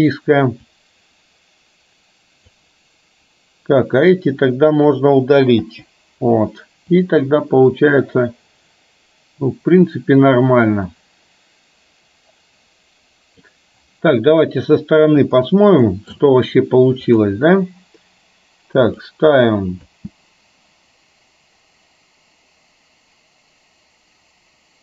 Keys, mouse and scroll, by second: 0.8-2.6 drag, 4.1-5.0 drag, 5.6 Delete, 7.0-13.6 drag, 15.4 click, 15.9 middle click, 19.0 click, 20.0 space.